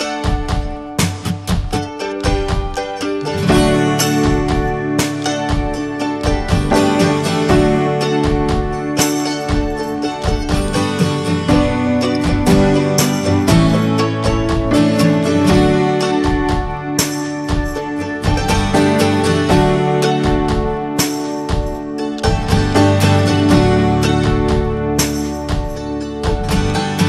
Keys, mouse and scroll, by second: 1.0 alt+shift+click, 1.3 scroll down 2, 1.6-3.4 middle drag, 3.4 alt+shift+click, 3.6 scroll down 2, 3.9 middle click, 4.2 scroll down 4, 4.5 shift+middle click, 5.4-6.0 scroll up 4, 5.7 shift+middle click, 6.6 alt+shift+click, 6.8 scroll down 1, 7.0-8.6 middle drag, 8.6 alt+shift+click, 8.9 middle click, 9.5 scroll up 2, 9.8 middle click, 10.8 alt+shift+click, 11.1-12.2 middle drag, 12.2 alt+shift+click, 12.4 scroll down 2, 12.6-14.0 shift+middle drag, 14.0 scroll up 1, 14.5 alt+shift+click, 17.0 right click, 17.2 scroll down 1, 17.4-19.0 middle drag, 19.0 a, 19.7 right click, 20.2 scroll down 2, 20.5-21.6 middle drag, 21.6 scroll down 1, 22.2 shift+middle click, 22.7 Tab, 22.8-23.2 drag, 23.2-23.6 middle drag, 23.6 ctrl+s, 24.3 click, 24.9 /, 25.3-25.6 drag, 25.7 /, 26.3 middle click, 26.6 Tab, 26.9 middle click.